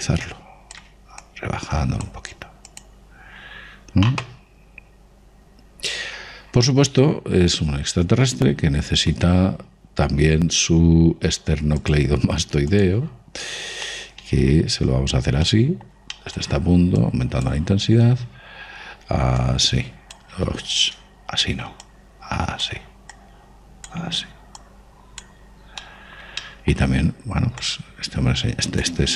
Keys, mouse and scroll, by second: 0.7-5.4 drag, 5.7-9.4 middle drag, 12.7 click, 14.0 middle click, 14.5 click, 14.7-18.8 middle drag, 17.9 click, 20.3 click, 21.8 ctrl+z, 22.8-27.3 drag, 26.7-28.9 middle drag, 28.5 click.